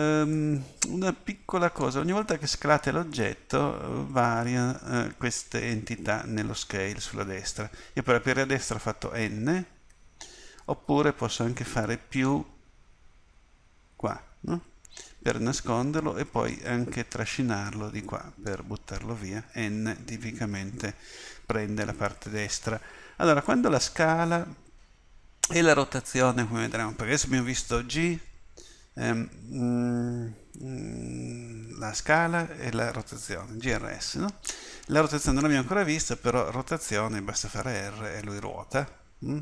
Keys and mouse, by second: 0.3-8.1 drag, 8.1-10.9 typing, 12.2-14.1 drag, 16.5-19.5 middle drag, 19.5 n, 20.1 n, 20.5 n, 37.5 r.